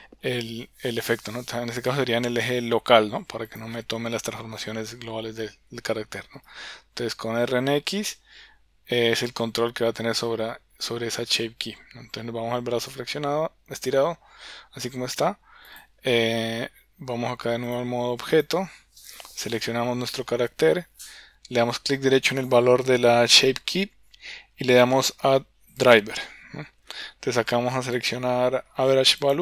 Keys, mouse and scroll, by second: 1.9 click, 6.3 r, 17.7-18.4 drag, 19.0 click, 22.4-29.4 right drag.